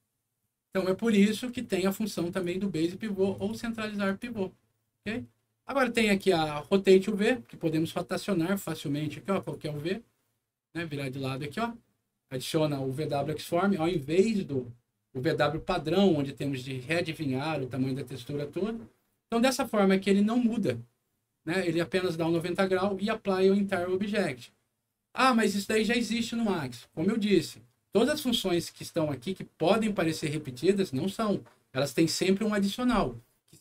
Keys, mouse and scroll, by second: 3.3 click, 4.0 click, 4.9 middle click, 5.4-6.1 scroll up 2, 7.9 middle click, 9.3 click, 22.2 click, 22.3 click, 25.2 scroll down 1.